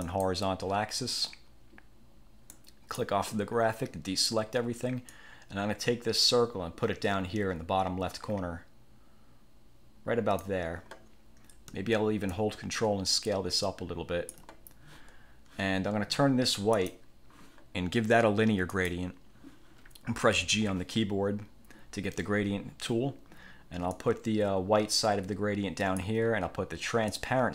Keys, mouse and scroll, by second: 0.2 click, 2.7 click, 5.3-10.7 drag, 12.5-14.6 ctrl+drag, 16.9 click, 18.8 click, 20.5 g, 24.1-26.3 drag, 27.2-27.5 drag.